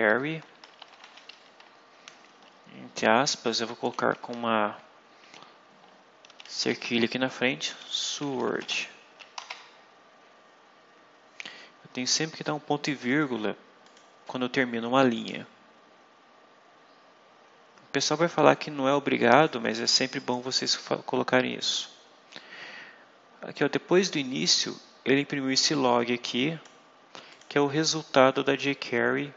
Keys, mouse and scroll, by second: 0.4 shift+9, 0.7 shift+0, 1.2 shift+Left, 2.9 shift+', 6.2 shift+3, 7.3-9.3 typing, 13.0 click, 13.7 click, 15.0 click, 19.3 click, 20.1 click, 25.6-26.7 drag, 27.2 click, 28.0-29.3 drag.